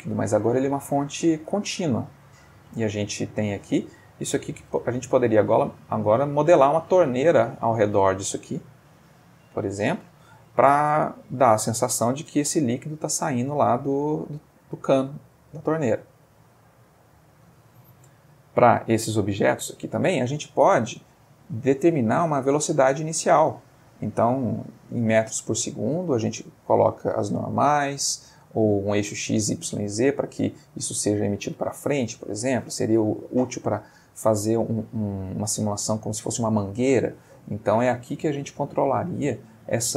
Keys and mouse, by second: 4.9-5.4 middle drag, 6.1 ctrl+Escape, 7.0-7.4 shift+middle drag, 7.5-8.6 ctrl+shift+middle drag, 8.6-9.1 ctrl+shift+middle drag, 11.0-12.0 middle drag, 12.3 ctrl+space, 18.7 click, 20.6-21.2 middle drag.